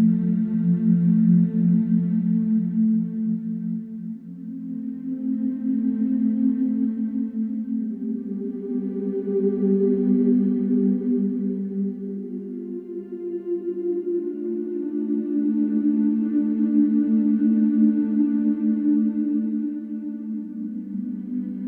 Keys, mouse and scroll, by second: 0.1 click, 0.7 alt+click, 1.1 alt+click, 1.8 g, 4.5 ctrl+b, 6.0 scroll down 2, 6.2 Tab, 6.6-7.8 middle drag, 7.8 scroll up 2, 8.2 Tab, 8.7 alt+click, 9.9 alt+shift+click, 11.0 alt+shift+click, 12.5 alt+click, 13.3 alt+shift+click, 13.9 ctrl+b, 16.6 Tab, 17.0 scroll down 2, 17.7 Tab, 18.7 l, 19.1 middle click, 20.4 g.